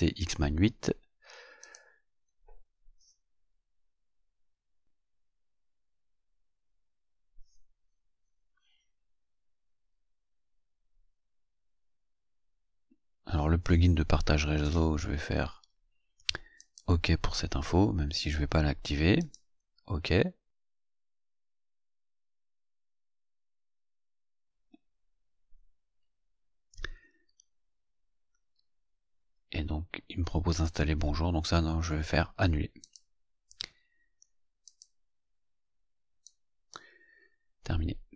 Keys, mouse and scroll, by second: 1.5 click, 16.4 click, 19.1 click, 20.7 click, 32.7 click, 34.5 click, 36.1 click.